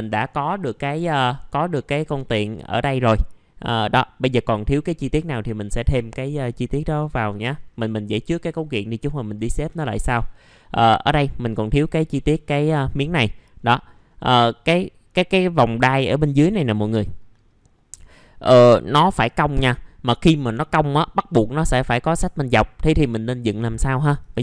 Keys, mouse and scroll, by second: 7.0 middle click, 7.6-10.9 scroll up 1, 10.9 middle click, 11.8 scroll up 1, 12.2 middle click, 13.5-14.2 scroll down 1, 14.2 middle click, 14.6-19.8 scroll up 1, 19.8-20.3 scroll down 1, 20.3 middle click, 20.9-23.8 scroll up 1, 23.8 middle click, 24.2 ctrl+right click.